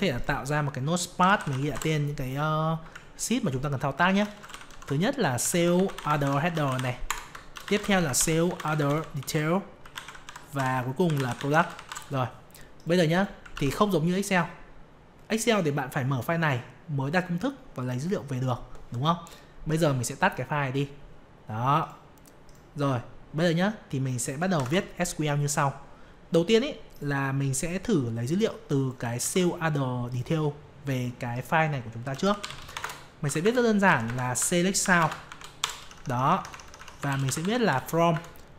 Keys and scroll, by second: 13.5 ctrl+s, 24.5 alt+F11, 29.6 ctrl+c.